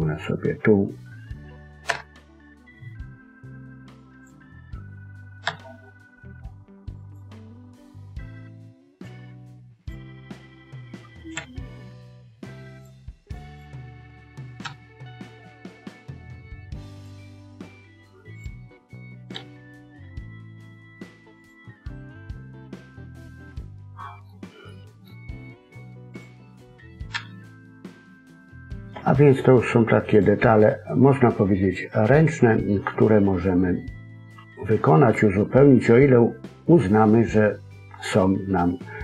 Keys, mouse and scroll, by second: 3.9 click, 5.4 g, 8.3 click, 9.7 click, 11.3 g, 13.4 click, 14.6 g, 18.3 click, 19.3 g, 21.6-23.3 scroll down 4, 21.9 middle click, 24.3 scroll down 1, 24.6 middle click, 24.6-24.9 scroll up 2, 25.2-26.1 scroll up 1, 26.1 click, 27.1 g, 31.2 middle click.